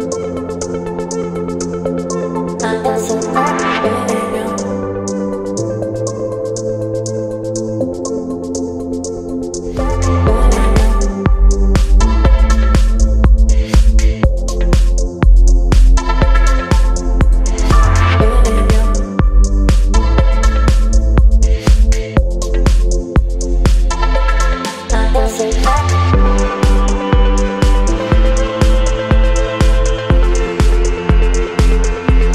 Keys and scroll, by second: 5.2 b, 5.5 space, 9.3 space, 10.0 space, 11.4 space, 11.9 space, 13.9 space, 16.0 space, 18.3 space, 23.3 space.